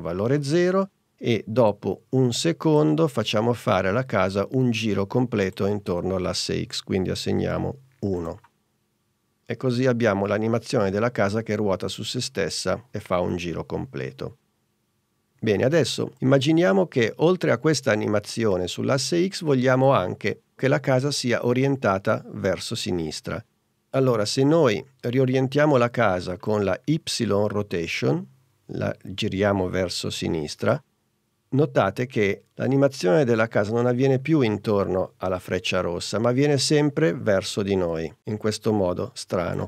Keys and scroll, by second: 7.4 i.